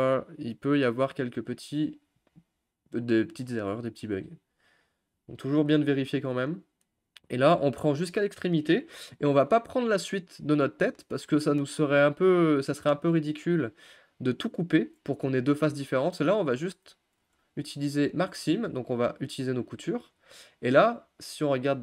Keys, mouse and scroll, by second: 1.3-1.8 scroll down 1, 1.8-3.2 shift+middle drag, 3.2-3.9 scroll up 1, 3.9-5.7 middle drag, 5.7 ctrl+click, 6.2-8.3 middle drag, 8.3-8.6 scroll up 1, 8.6-9.0 scroll down 1, 9.0-18.2 middle drag, 18.2 u, 18.5 shift+middle click, 19.2 click, 19.4 middle click, 20.2-20.5 scroll up 2, 20.5-21.1 scroll down 1, 21.1-21.8 middle drag.